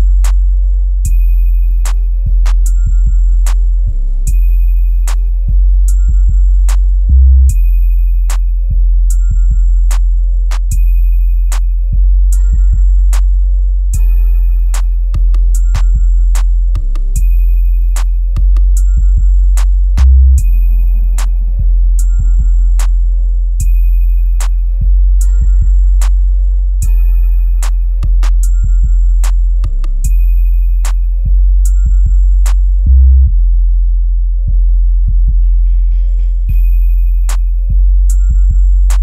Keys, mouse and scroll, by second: 1.0-2.4 shift+drag, 2.4-3.1 scroll down 1, 4.0-5.7 drag, 5.7-6.1 scroll down 1, 6.3 click, 7.5 scroll up 1, 8.1 click, 9.0-10.4 shift+drag, 10.4 scroll down 1, 11.1 click, 13.6-14.0 scroll down 1, 14.7-19.5 drag, 19.5 right click, 20.0 scroll up 1, 22.4-29.3 shift+drag, 31.0-31.8 scroll down 1, 32.2-32.8 scroll up 1, 33.5 click, 35.3 ctrl+k, 38.8 click.